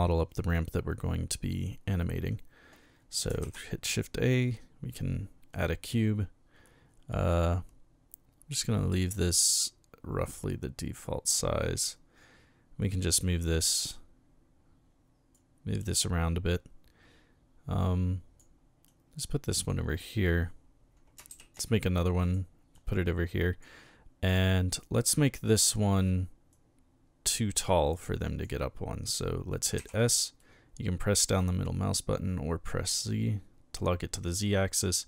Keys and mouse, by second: 3.4 shift+a, 5.5 click, 9.6-11.3 middle drag, 11.7-13.3 drag, 13.8-15.3 drag, 15.8-18.4 drag, 18.9-19.7 drag, 21.3 shift+d, 21.6-22.0 middle drag, 22.2 click, 22.7-23.6 drag, 24.3-25.6 drag, 26.5-27.6 drag, 28.0 click, 29.8 s, 30.4 middle click.